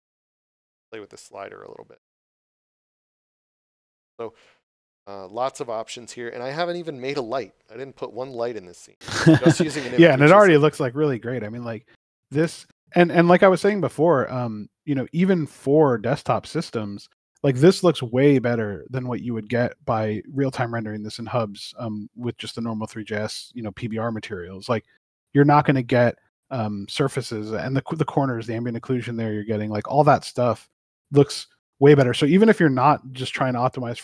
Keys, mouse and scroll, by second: 3.1 click, 5.4 x, 14.3 middle click, 31.1 right click.